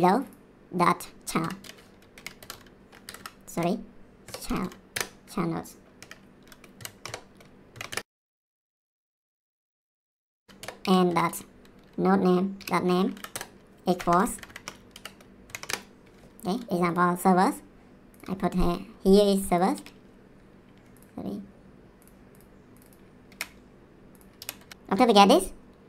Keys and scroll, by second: 1.4-5.1 typing, 3.0 Down, 6.0 Right, 6.8 shift+p, 7.0 BackSpace, 7.7 shift+[, 7.9 Return, 8.8-12.5 typing, 13.1 Down, 13.3 Return, 13.9 =, 14.3 shift+', 14.9 Right, 15.4 shift+[, 15.6 Return, 23.2 ctrl+c, 24.4 ctrl+v, 24.6 ctrl+s.